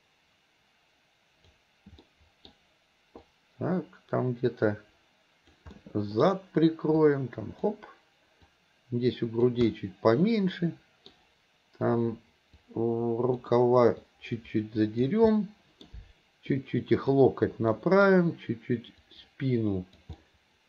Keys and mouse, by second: 2.1 middle click, 3.3-5.5 drag, 5.8 middle click, 7.0 click, 8.5-9.5 drag, 9.6-11.1 middle drag, 12.7 click, 14.1-15.1 drag, 15.3 middle click, 16.6 click, 17.8 middle click, 19.1-20.1 drag, 20.2 middle click.